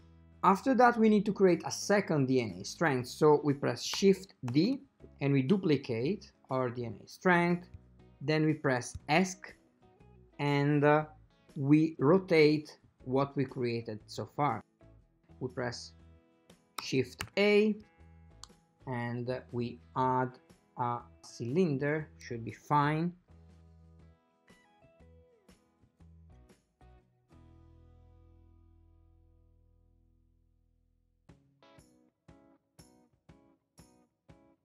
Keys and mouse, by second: 4.9 shift+d, 17.3 shift+a, 24.0 click, 25.9 click, 26.5 click, 26.8 click, 27.3 click, 27.5 click, 28.8 click, 30.7 shift+click, 31.6 shift+click.